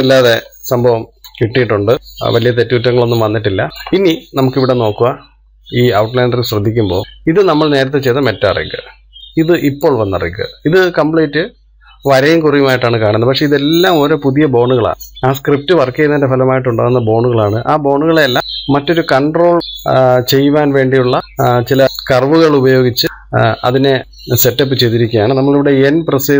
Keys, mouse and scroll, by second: 1.9-2.4 scroll up 2, 2.4-4.1 middle drag, 4.1-4.9 scroll up 1, 4.9-7.0 shift+middle drag, 7.5-9.8 drag, 11.3 click, 14.1-16.7 scroll down 1, 17.6-19.9 scroll up 1, 25.3-26.3 middle drag.